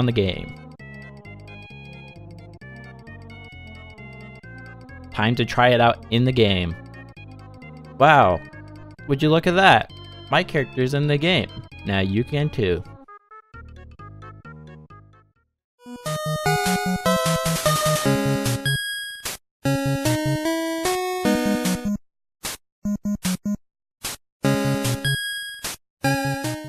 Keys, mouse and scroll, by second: 0.6-1.8 scroll down 1.